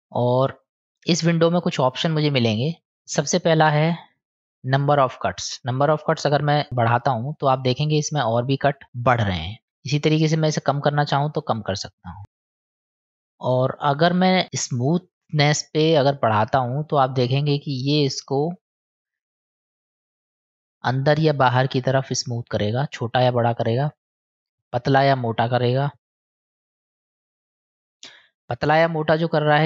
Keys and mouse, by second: 0.1 click, 6.1 click, 6.5 click, 9.7-11.5 drag, 12.2 click, 12.3 click, 12.5 click, 12.7 click, 12.8 click, 16.1-29.6 drag.